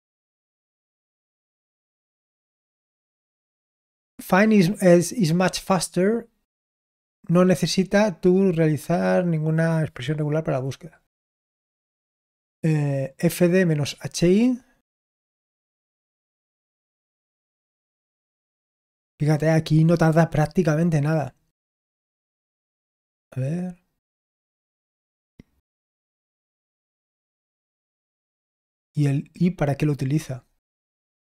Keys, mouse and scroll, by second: 2.0-11.3 scroll down 1, 11.3-21.1 scroll down 1, 21.1-31.2 scroll down 1.